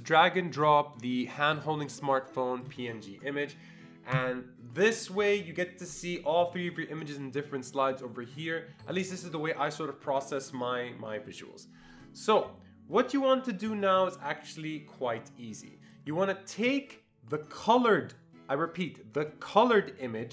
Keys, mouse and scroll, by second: 1.4-6.8 drag, 15.8 click, 16.6 click.